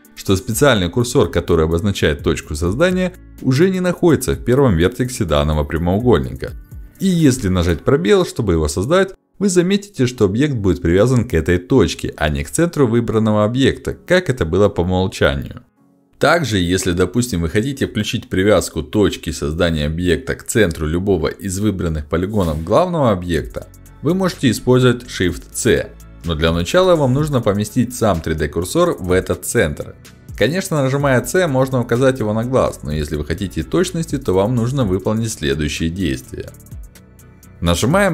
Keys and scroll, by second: 2.8 space, 4.9 ctrl+space, 16.5 Delete.